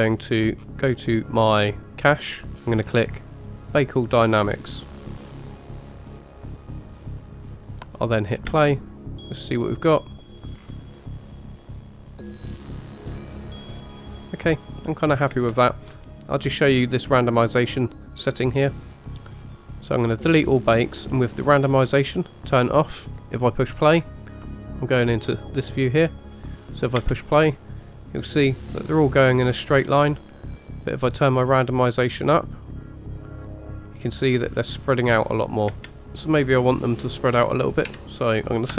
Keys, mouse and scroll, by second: 0.6-1.4 scroll down 3, 3.6-7.6 drag, 8.5 space, 10.6-11.1 scroll down 3, 15.3 space, 19.2 click, 21.2 click, 23.1 middle click, 23.1-24.3 scroll up 3, 24.4-26.5 middle drag, 27.0 space, 31.0-32.7 drag, 33.7-35.0 drag, 35.7 space, 36.0-38.7 drag, 36.0 space.